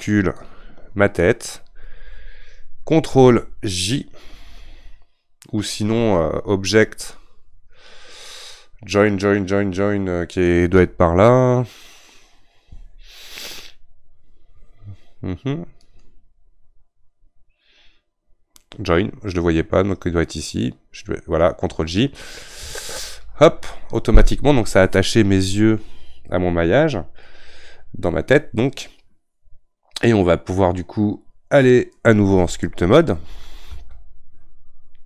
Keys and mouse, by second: 0.4 shift+click, 23.3 ctrl+j.